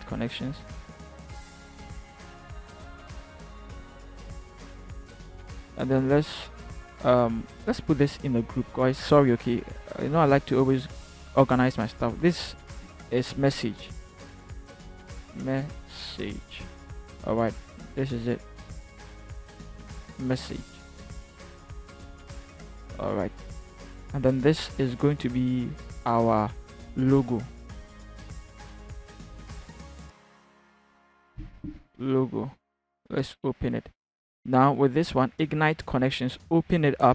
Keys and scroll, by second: 5.1 v, 12.8 ctrl+g, 14.5 Caps_Lock, 15.0-16.2 typing, 27.7 ctrl+g, 30.5-31.0 typing, 31.6 Return.